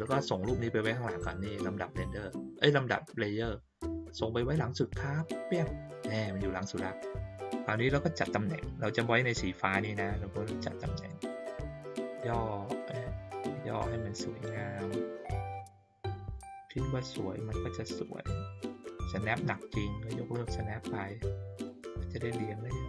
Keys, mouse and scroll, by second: 5.1 click, 7.5 click, 9.8-11.2 drag, 12.7 click, 13.7-16.3 drag, 16.9-19.3 drag, 20.3 click, 21.6-22.8 drag.